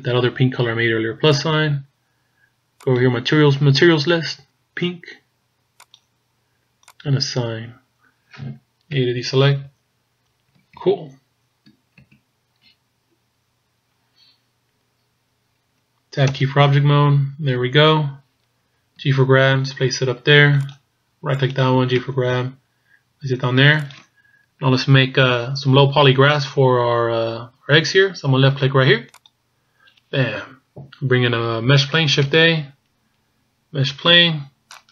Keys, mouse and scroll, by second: 0.1 scroll up 2, 1.3 click, 2.9 click, 7.0 click, 7.8-9.0 scroll down 4, 9.0-9.6 scroll down 3, 9.0 a, 9.7-10.3 scroll up 3, 10.4 scroll down 2, 11.1-11.6 shift+scroll up 1, 13.0-13.4 scroll down 2, 13.4-13.7 scroll up 2, 16.4 Tab, 19.1 g, 21.5 right click, 22.2 g, 29.2 click, 32.3 shift+a.